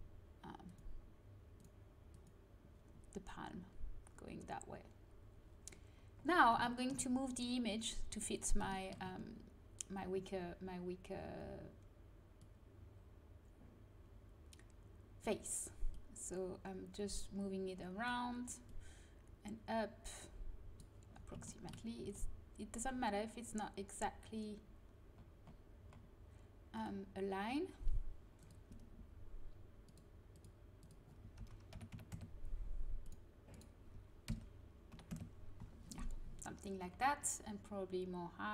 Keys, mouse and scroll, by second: 0.6-3.9 drag, 5.6 middle click, 6.6 click, 12.7-14.2 drag, 15.9-21.0 drag, 21.2 click, 22.0 a, 26.7-32.1 drag, 33.0-35.0 drag.